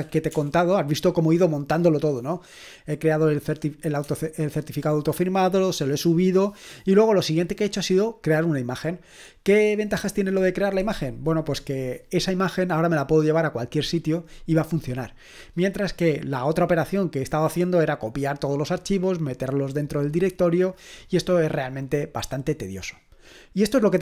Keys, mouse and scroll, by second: 0.0-0.3 typing, 4.0 Caps_Lock.